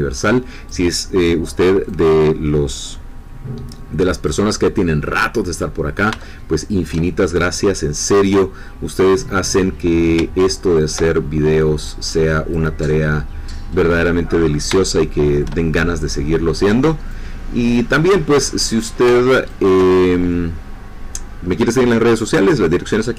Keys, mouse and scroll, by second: 1.8-4.4 drag, 6.2-7.4 shift+middle drag, 7.5-9.5 drag, 10.7-12.7 ctrl+drag, 14.8 shift+middle click, 17.1-19.0 drag, 19.5-22.1 ctrl+drag.